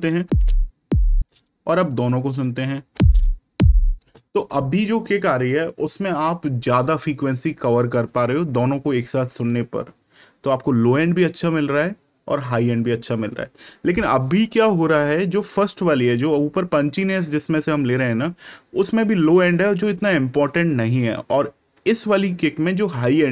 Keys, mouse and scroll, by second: 0.2 space, 2.2 click, 2.8 space.